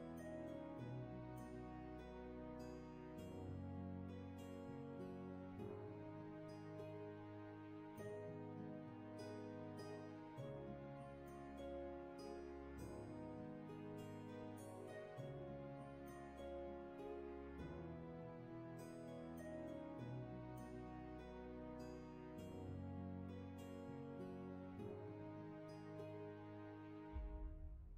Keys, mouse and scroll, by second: 2.7 ctrl+z, 20.2 ctrl+z, 24.5 ctrl+z.